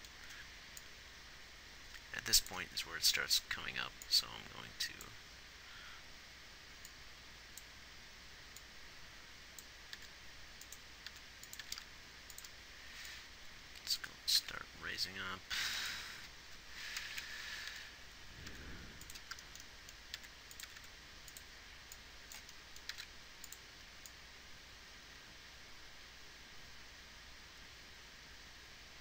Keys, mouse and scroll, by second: 10.4 r, 11.5 r, 14.7 g, 17.3 Right, 17.5 Right, 18.8 r, 20.5 r, 21.0 r, 23.2 g, 25.5-29.0 right drag.